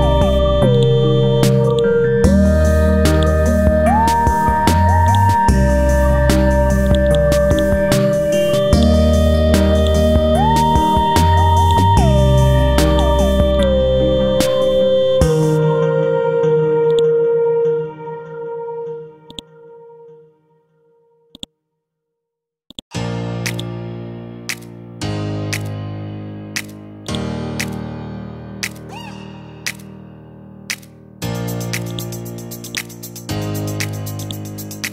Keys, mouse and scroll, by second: 4.6-8.6 drag, 14.2-15.6 scroll down 1, 15.6 scroll up 1, 16.4-16.9 scroll up 1, 16.9-19.3 drag, 19.3 right click, 21.3 click, 23.8 ctrl+click, 25.4-27.0 scroll up 1, 27.0 click, 28.8 KP_4, 30.8-31.1 scroll down 1, 31.9-33.5 drag, 33.5-34.0 scroll up 1, 34.2 right click.